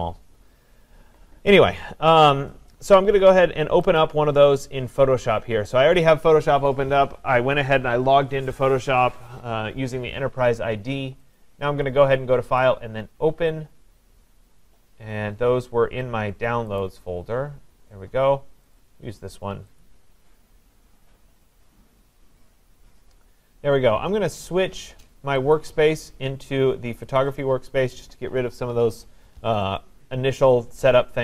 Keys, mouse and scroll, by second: 0.0 click, 4.0 click, 11.3 click, 12.6 click, 14.8-16.4 scroll, 16.8 click, 18.7 click, 19.8 click, 25.6 click, 27.2 click.